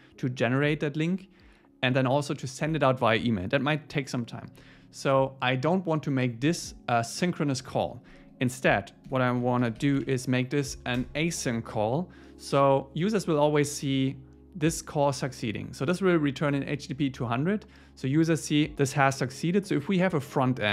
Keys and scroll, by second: 9.1 alt+l, 11.0 Return.